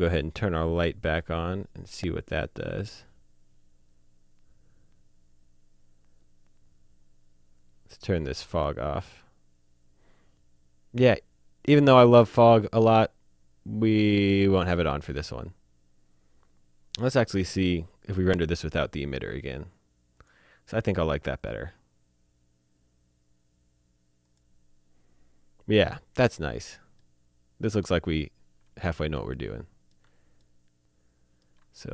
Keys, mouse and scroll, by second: 1.9 click, 8.5 click, 20.1 click, 24.2 click, 26.1 scroll down 1, 26.4 shift+middle click, 27.6 alt+middle click, 28.1 middle click, 29.1 click, 29.4 middle click, 30.0 shift+middle click.